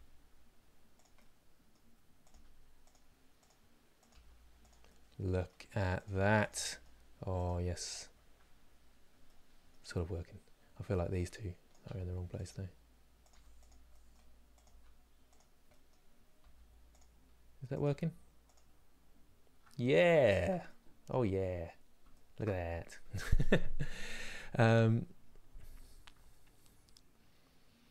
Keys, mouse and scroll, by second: 0.9-2.0 middle drag, 2.0 g, 3.1 click, 3.8 click, 4.6-5.7 middle drag, 5.7 click, 5.8 g, 6.4 middle click, 7.1 click, 7.9-8.5 scroll down 5, 9.0 middle click, 9.8 scroll up 1, 11.4 click, 11.5 g, 13.0 click, 13.7 middle click, 14.3 click, 14.4 g, 15.4 middle click, 16.1 g, 17.5 click, 18.7 scroll down 4, 19.7 middle click, 20.1 Tab, 20.4-21.4 middle drag, 21.4 scroll up 2, 21.8-27.9 shift+middle drag.